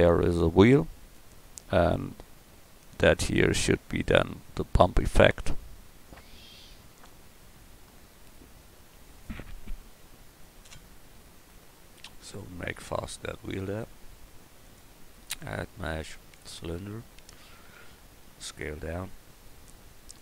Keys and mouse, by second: 13.2-15.3 drag, 18.0 s.